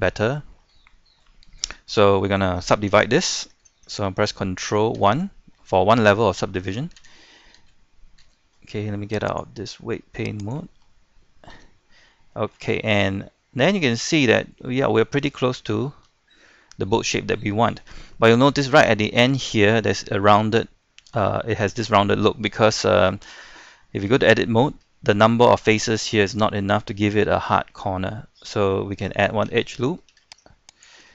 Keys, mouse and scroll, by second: 0.8 shift+middle click, 5.0 ctrl+1, 5.5 middle click, 7.0 Tab, 9.3-10.4 drag, 11.6 Tab, 12.3-18.8 shift+middle drag, 19.5 shift+middle click, 22.6 scroll down 1, 22.8 middle click, 24.1 Tab, 24.6 scroll up 1, 24.9 shift+middle click, 28.4-30.1 scroll down 1, 30.7 ctrl+r, 30.7 click.